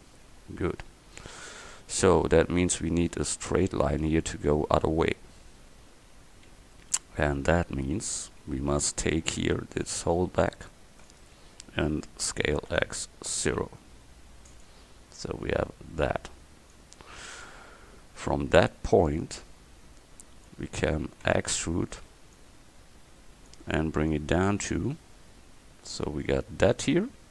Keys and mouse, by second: 3.0 Tab, 8.0 a, 9.4 c, 11.2 click, 12.4 s, 15.3-16.8 drag, 17.1 click, 19.0-21.3 drag, 21.3 e, 22.4-23.7 drag.